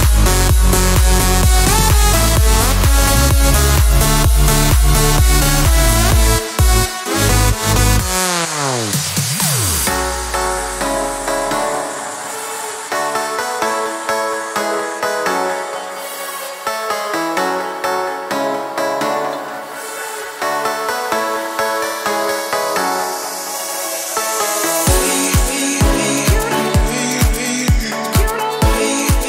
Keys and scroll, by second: 0.4 Escape, 4.9 Escape, 22.4 Escape.